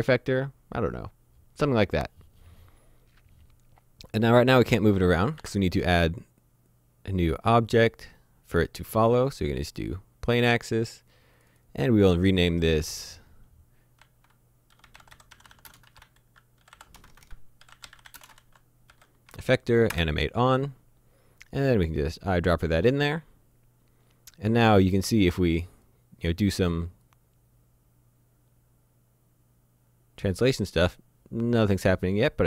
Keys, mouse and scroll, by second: 5.2 click, 5.4 shift+a, 9.7 click, 11.4 click, 13.3 shift+Num_Lock, 14.0-19.3 typing, 19.9 Return, 22.4 click, 25.1 click.